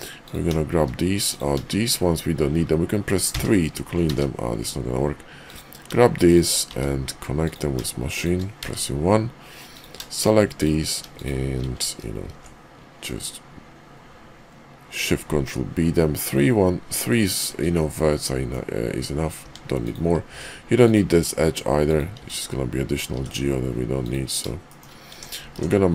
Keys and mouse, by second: 0.2 click, 3.3 3, 4.0 ctrl+z, 6.7 1, 7.4 click, 8.0 shift+click, 8.6 1, 10.1 shift+click, 10.5 shift+click, 11.1 shift+click, 12.2 ctrl+shift+b, 17.8 middle click, 19.4 Tab, 19.8 click, 20.2 x, 21.7 click, 22.2 x, 23.1 x, 24.6 shift+middle click, 25.1 Tab, 25.5 alt+x.